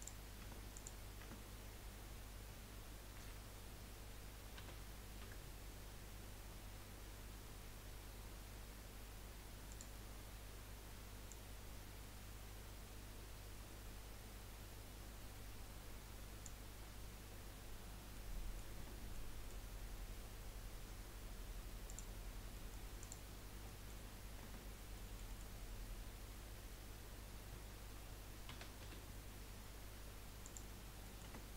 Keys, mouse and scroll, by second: 0.0 click, 0.4 Tab, 0.7 click, 1.2 Tab, 1.7 scroll up 1, 3.2 l, 4.6 s, 10.1-10.5 scroll up 2, 11.3 click, 18.1 middle click, 18.8 Tab, 19.1 scroll down 1, 21.9 click, 22.4 scroll down 2, 22.7 middle click, 23.0 click, 23.4 scroll down 3, 23.6 middle click, 24.0-24.4 scroll up 5, 24.4 Tab, 25.0-28.5 middle drag, 28.5 s, 30.8 scroll down 2, 31.0 middle click, 31.2 Tab.